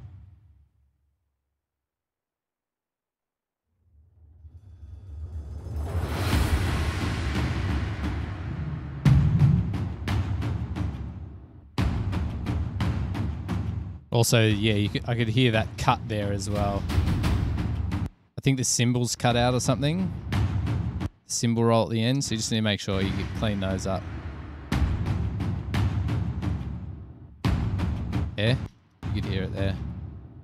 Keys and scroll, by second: 15.6 super+=, 18.3 space, 19.4 space, 20.2 super+], 20.3 super+], 20.7 super+[, 21.3 space, 22.5 space, 22.8 space, 23.2 space, 28.9 space, 29.3 space, 30.0 super+], 30.1 super+].